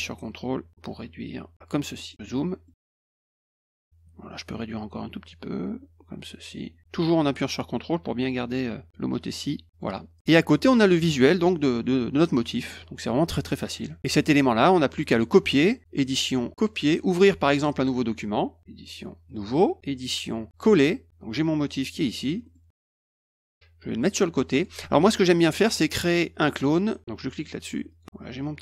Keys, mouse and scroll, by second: 2.0 middle click, 2.2 middle click, 2.5 middle click, 3.4 click, 5.6-6.4 ctrl+drag, 7.6 ctrl+click, 9.7 click, 10.2 click, 10.3 middle click, 11.7 middle click, 12.6 middle click, 13.1 middle click, 14.0 click, 15.9 click, 16.6 click, 19.3 click, 20.0 click, 20.6 click, 21.1-21.8 drag, 21.9 middle click, 21.9-22.5 scroll up 4, 22.1 middle click, 22.3 middle click, 23.1-24.6 drag, 27.9 click, 28.4-28.6 drag.